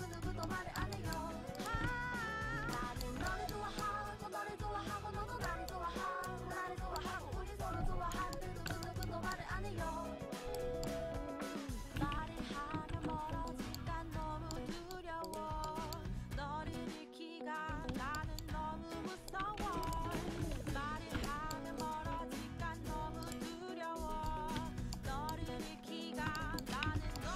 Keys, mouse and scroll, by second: 1.8 g, 2.6 click, 2.7 a, 2.9-4.3 drag, 2.9-5.0 middle drag, 2.9 right click, 6.4-8.2 right drag, 7.6-9.3 drag, 8.4-9.8 middle drag, 10.5 right click, 12.2 ctrl+x, 12.6 a, 13.0 ctrl+t, 13.2 a, 16.7-18.0 drag, 16.7-17.8 right drag, 18.0 a, 19.2-21.8 drag, 19.7 ctrl+x, 20.0 ctrl+x, 20.3 a, 20.6 ctrl+t, 20.9 a, 22.3 click, 23.3 click, 24.3 click, 24.6 z, 25.2 middle click, 25.5 z, 26.1 a, 27.0 alt+z.